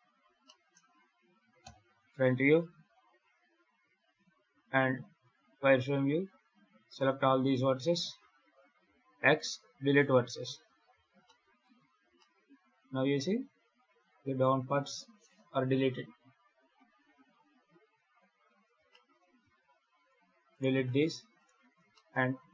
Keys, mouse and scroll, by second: 0.3 middle click, 1.5 KP_1, 2.4 1, 4.8 z, 6.1 click, 8.0 x, 8.7 x, 11.1 middle click, 11.6 z, 12.0 middle click, 17.7 KP_7, 18.8 shift+middle click, 19.3 Tab, 19.8-20.4 scroll up 2, 20.4 right click, 20.6 x, 21.2 right click, 21.8 shift+middle click, 22.2 shift+d.